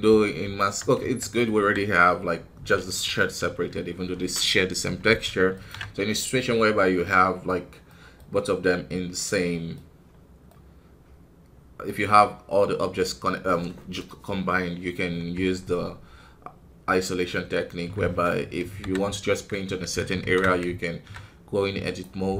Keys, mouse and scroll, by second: 0.9 Tab, 1.1 middle click, 1.5 KP_1, 5.7 ctrl+Tab, 6.9-9.9 middle drag, 9.9-10.4 scroll up 1, 10.4-12.2 middle drag, 12.2-13.1 scroll down 2, 13.1-15.3 scroll down 1, 15.3 Tab, 17.6-18.7 scroll up 1, 20.1 alt+KP_3, 21.7-22.3 drag.